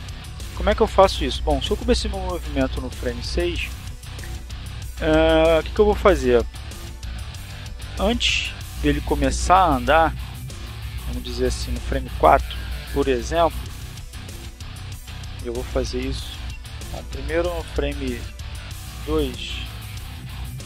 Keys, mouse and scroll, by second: 6.6-10.2 drag, 14.4 click.